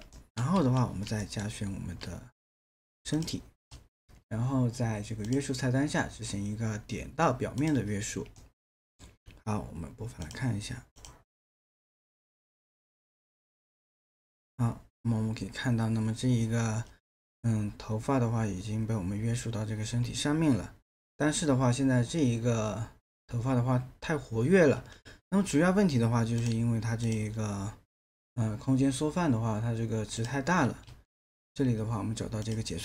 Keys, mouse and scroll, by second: 0.2 alt+middle click, 0.6 q, 1.2 alt+middle click, 8.4 alt+middle click, 30.8 ctrl+a.